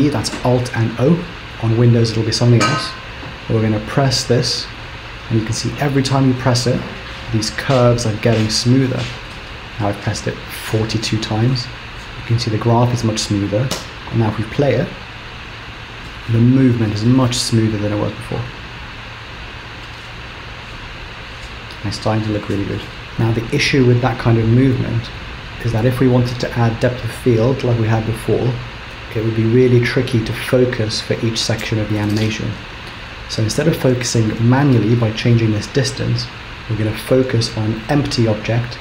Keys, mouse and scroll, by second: 4.1 alt+o, 4.6 alt+o, 5.6 alt+o, 6.1 alt+o, 6.3 alt+o, 6.4 alt+o, 6.5 alt+o, 6.8-9.2 alt+o, 9.4 alt+o, 9.6 alt+o, 9.8 alt+o, 9.8 alt+o, 13.8 space, 14.8 scroll down 1, 27.0 click, 34.5 click.